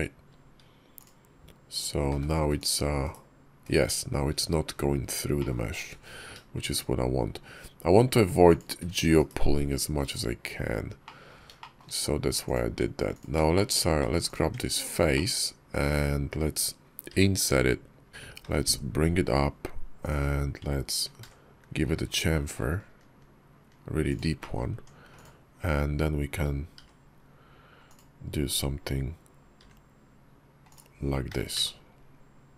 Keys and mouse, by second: 0.8 click, 2.0 h, 2.4 click, 2.9 /, 3.5 /, 5.2 click, 5.8 alt+x, 10.9 click, 11.4 shift+click, 12.3 click, 12.5 Tab, 13.0 click, 13.4 shift+click, 13.7 Tab, 14.1 click, 14.3 Tab, 14.6 click, 15.0 click, 17.0 i, 18.3 e, 20.9 ctrl+b, 24.2 click, 24.6 Tab, 26.6 i, 29.4 i, 31.1 g.